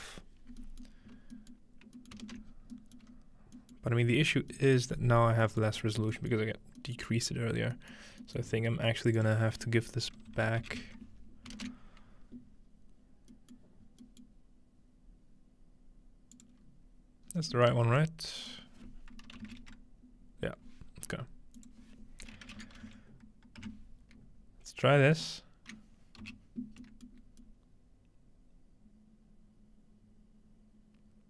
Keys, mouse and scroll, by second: 0.2-3.1 scroll down 2, 0.9 middle click, 3.1 scroll up 1, 4.0 scroll up 1, 4.3 scroll down 1, 5.1 scroll down 1, 5.9 scroll up 2, 6.5 scroll down 2, 7.1 scroll up 2, 7.7 middle click, 8.4 middle click, 9.2-11.0 drag, 13.7 middle click, 13.8-16.3 scroll down 2, 16.3 click, 17.3-19.2 scroll up 3, 17.7-18.9 middle drag, 18.4 click, 19.3 click, 21.6-23.1 drag, 23.6 Return, 25.0-26.4 middle drag, 26.8 middle click, 27.2-28.8 scroll up 1, 27.4-31.2 middle drag.